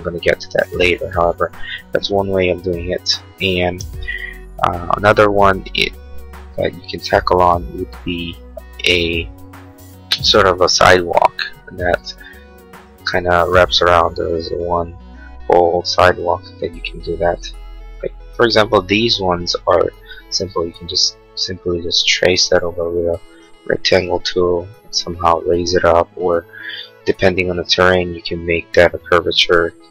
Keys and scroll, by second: 24.2 p.